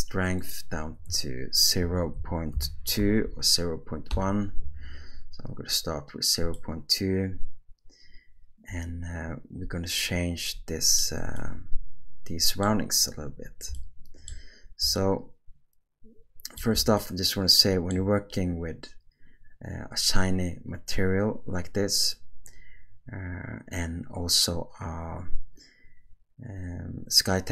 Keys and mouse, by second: 4.3 click, 6.5-11.0 middle drag, 11.4-12.6 shift+middle drag, 13.8-14.8 shift+middle drag, 15.0-16.7 ctrl+middle drag, 17.0-17.9 shift+middle drag.